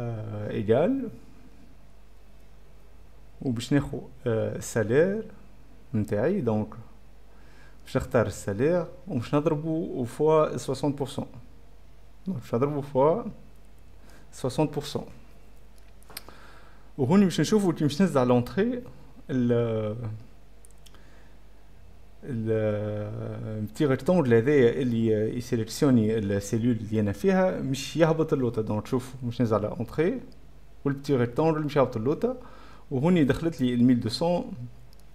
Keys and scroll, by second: 0.7 Pause, 1.5 =, 9.0 F6, 9.0 7, 10.5-12.7 typing, 12.0 shift+F4, 12.0 shift+F5, 17.0 s, 28.7 F10, 28.8 [, 28.9 ], 29.7 Return, 29.9 ,.